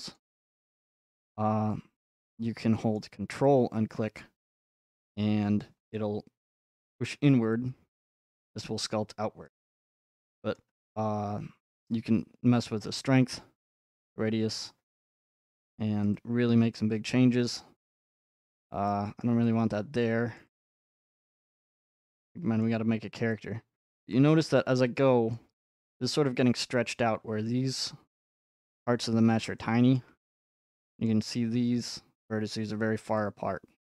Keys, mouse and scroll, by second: 0.2 scroll up 1, 2.4 scroll up 1, 2.9 scroll up 3, 5.6 ctrl+click, 7.1 middle click, 9.5 click, 9.6 middle click, 9.6 middle click, 10.5-11.7 scroll, 13.4 click, 14.7 click, 15.2 middle click, 16.0 click, 16.8 click, 17.8 middle click, 18.3 ctrl+z, 19.2 middle click, 20.3 middle click, 20.4-21.6 drag, 21.6 middle click, 23.7 middle click, 24.0 click, 25.3 middle click, 25.3-25.8 scroll, 27.0 scroll, 27.9-29.1 middle drag, 30.0-33.2 shift+middle drag.